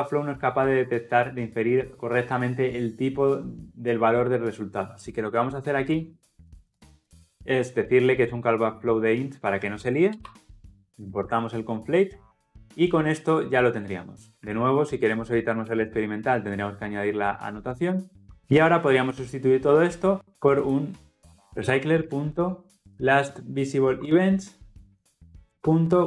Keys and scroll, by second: 9.8 alt+Return, 11.1 ctrl+alt+l, 11.1 ctrl+alt+o, 14.6 alt+Return, 21.7 Return, 23.8 Return.